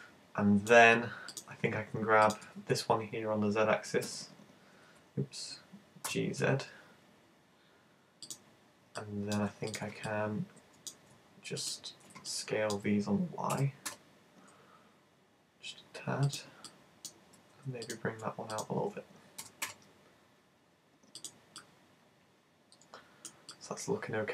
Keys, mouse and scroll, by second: 1.3 right click, 2.6 super+z, 4.0 super+z, 4.8 z, 6.1 g, 8.4 click, 9.0 shift+middle click, 9.7 shift+right click, 10.1 middle click, 11.6 shift+right click, 12.4 middle click, 13.5 s, 16.4 click, 16.7 middle click, 17.9 shift+right click, 18.6 right click, 19.4 g, 21.2 click, 21.6 middle click, 23.6 middle click.